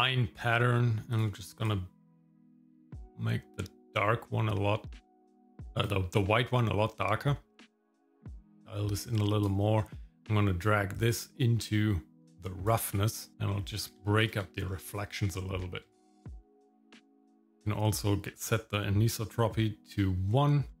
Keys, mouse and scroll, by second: 1.1 click, 8.2-9.5 drag, 9.8 middle click, 11.0-12.7 drag, 13.5 middle click, 14.2 ctrl+shift+click, 14.7 scroll up 2, 15.4 shift+middle click, 18.5 click, 20.7-20.8 scroll down 3.